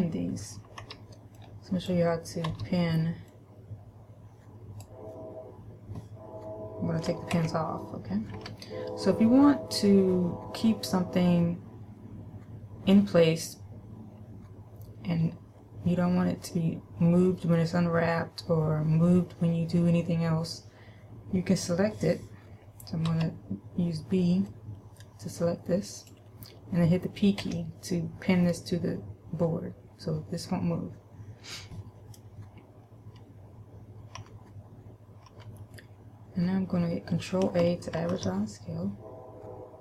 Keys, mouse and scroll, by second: 1.4 b, 1.8 click, 3.0 b, 7.8 alt+p, 8.8 a, 23.5 b, 27.9 p, 34.6 a, 35.7 a, 38.4 ctrl+a.